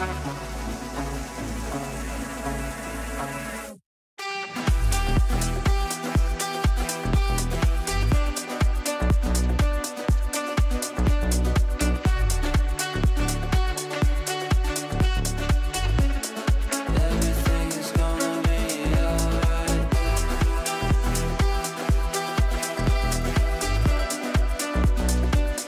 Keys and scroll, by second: 6.2 ctrl+q, 13.4 Up, 16.9 shift+F2, 17.2 Escape.